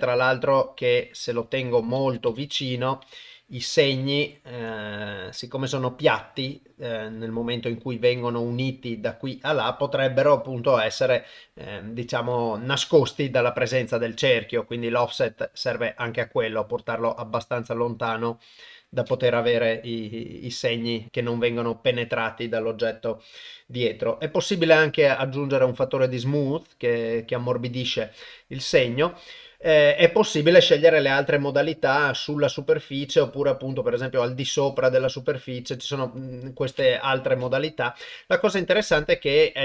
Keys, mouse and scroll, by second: 2.9 middle click, 4.2 ctrl+middle click, 4.8-6.6 middle drag, 7.0 middle click, 8.2 middle click, 9.8 ctrl+middle click, 10.4 middle click, 11.3 middle click, 15.3-18.6 drag, 19.4-21.1 middle drag, 21.5 KP_0, 25.4-27.9 drag, 30.0-34.2 drag, 35.1-36.3 drag, 37.6-39.3 ctrl+middle drag.